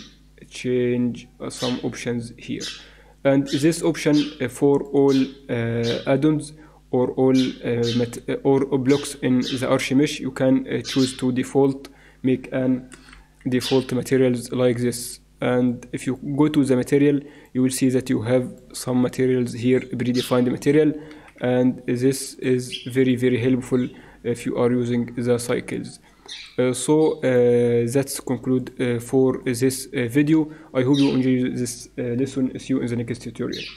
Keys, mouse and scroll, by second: 3.7-7.6 drag, 8.0-9.3 middle drag, 12.9 n, 13.1 t, 15.6-21.9 drag, 22.3-24.2 drag, 27.2-29.5 drag.